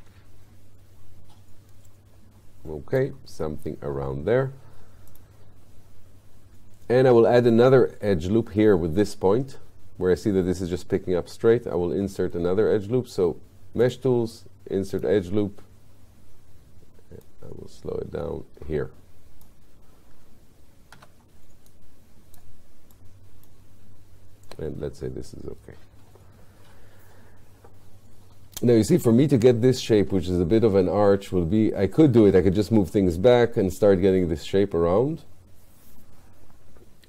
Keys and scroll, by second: 21.0 q.